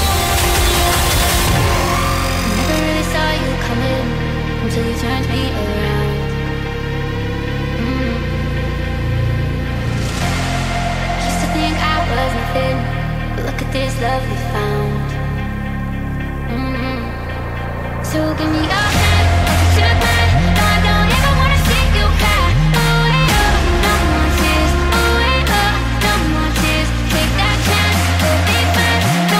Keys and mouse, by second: 0.9 a, 1.2 a, 3.8 click, 4.6 c, 13.0-14.3 middle drag, 15.0 c, 18.4 middle click, 19.8 c, 21.5-22.5 middle drag, 23.1 c, 26.8 middle click.